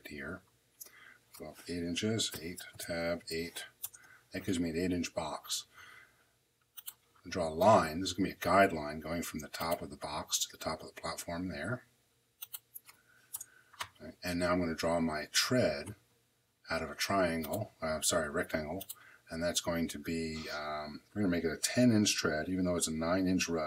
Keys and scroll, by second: 2.1 8, 2.6 Tab, 3.1 8, 3.7 Return, 13.2 Return.